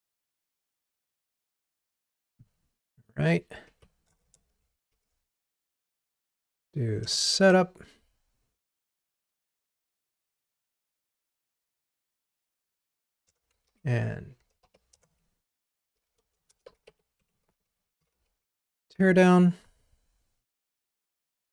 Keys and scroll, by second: 2.0 super+c, 4.9 super+j, 7.1 Return, 8.6 Return, 8.7 super+v, 10.8 BackSpace, 12.1 BackSpace, 13.8 super+j, 15.1 Return, 17.7 Escape, 18.5 super+BackSpace, 19.2 ctrl+r.